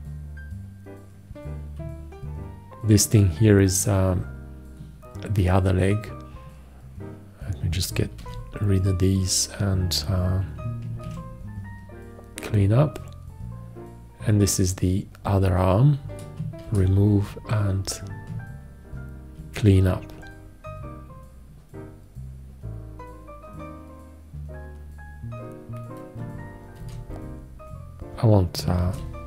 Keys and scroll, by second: 8.4 shift+x, 11.3 alt+q, 16.9 shift+x, 19.6 alt+q, 27.0 shift+x, 29.1 shift+x.